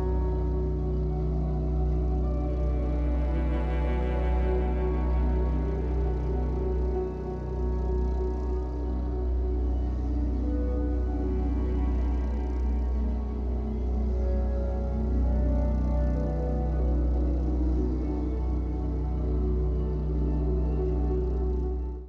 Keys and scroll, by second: 15.5 ctrl+alt+shift+e.